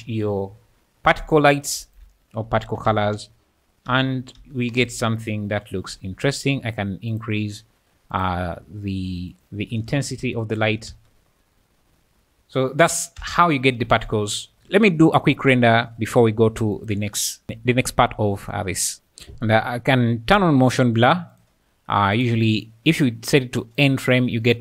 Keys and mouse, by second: 0.5 `, 1.6 alt+a, 1.9 alt+a, 2.6 shift+right click, 2.9 space, 3.9 space, 4.4 space, 4.8 space, 7.1 click, 8.1 click, 9.3 click, 10.9 space, 13.2 space, 14.7 KP_0, 16.7 click, 18.5-18.9 drag, 18.9 space, 21.0 click, 21.4 click, 22.2-23.8 drag.